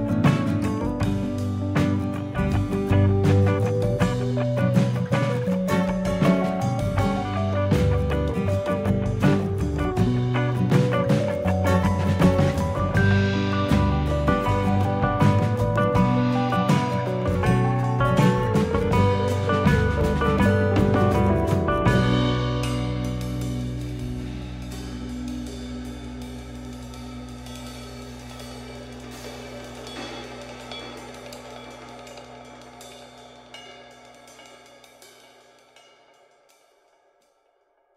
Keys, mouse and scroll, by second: 1.6 click, 3.0 click, 4.2 shift+click, 5.1 m, 6.9 shift+middle click, 7.7 middle click, 8.7 ctrl+r, 11.7 click, 12.3 shift+click, 13.0 m, 14.4 click, 14.8 shift+click, 15.1 middle click, 15.8 m, 17.0 click, 17.6 shift+click, 18.4 m, 19.3 middle click, 20.0 shift+middle click, 20.4-20.8 scroll down 1, 20.8 click, 21.2 shift+click, 22.0 m, 23.4 click, 24.0 shift+click, 24.8 m, 25.9-26.3 scroll down 4, 26.3 middle click, 28.2 click, 28.9 click, 29.4 shift+click, 29.8 shift+click, 30.6 x, 31.7 middle click, 33.0 z, 34.1 middle click, 34.9 scroll down 4, 35.3 shift+middle click, 35.6 middle click.